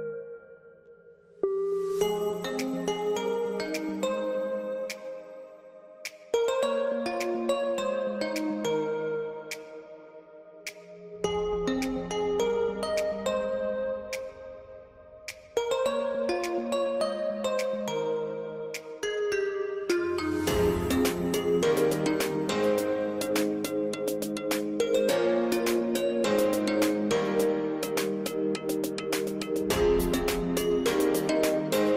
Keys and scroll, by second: 5.0 0, 5.3 Tab, 17.0-17.8 typing, 18.2 Return, 24.9 Escape, 24.9 f, 27.8-28.6 typing.